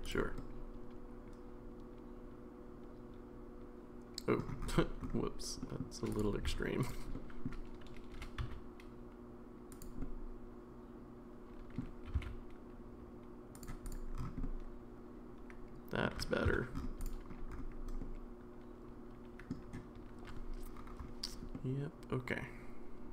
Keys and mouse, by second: 0.4-4.4 middle drag, 5.6 middle drag, 6.5 Tab, 7.1 middle click, 8.1 g, 10.0-11.8 middle drag, 12.1 g, 14.4-16.0 middle drag, 16.5 Tab, 18.0-19.5 middle drag, 21.5-23.1 middle drag.